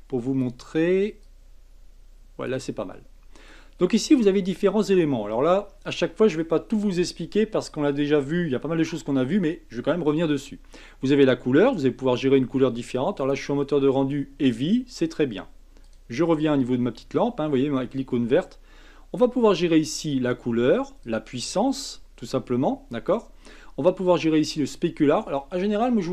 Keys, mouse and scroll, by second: 2.9-6.0 middle drag, 13.2 click, 15.8 click, 21.0-24.0 drag.